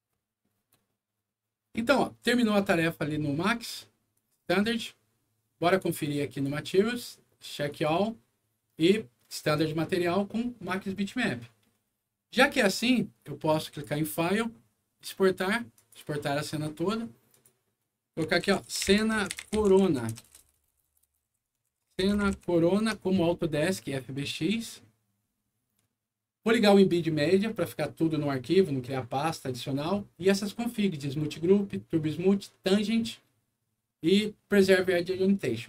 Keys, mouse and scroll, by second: 2.9 click, 4.1 click, 6.2 click, 7.6 click, 13.6 click, 15.7 click, 17.3 click, 18.2-22.9 typing, 24.1 click.